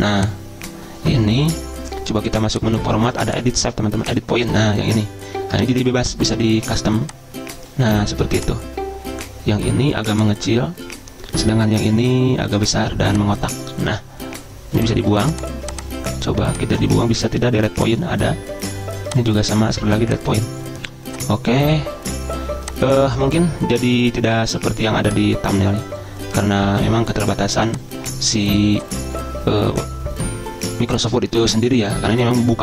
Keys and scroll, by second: 31.4 ctrl+a, 32.0 ctrl+], 32.1 ctrl+], 32.2 ctrl+].